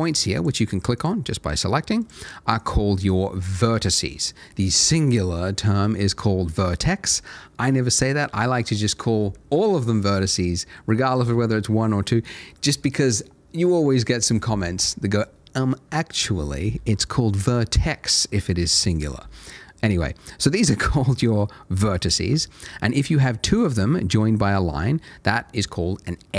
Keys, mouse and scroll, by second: 4.1-7.0 scroll up 1, 7.0 middle click, 7.9 scroll down 1, 18.5 middle click, 21.1 click, 21.9-22.3 scroll up 1, 22.4 shift+middle click, 22.7 shift+scroll up 1, 23.5 shift+click, 23.8 shift+middle click, 24.3-26.3 scroll up 1.